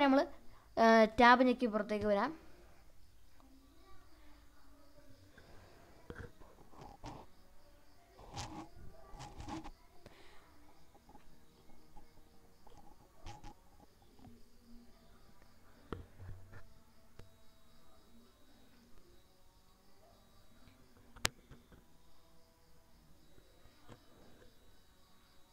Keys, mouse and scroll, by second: 1.4 shift+middle click, 3.9 alt+s, 5.6 right click, 8.5 ctrl+alt+s, 12.1 alt+e, 13.8 alt+s, 15.2 right click, 21.1 click, 22.2-23.4 drag, 24.3-25.5 drag.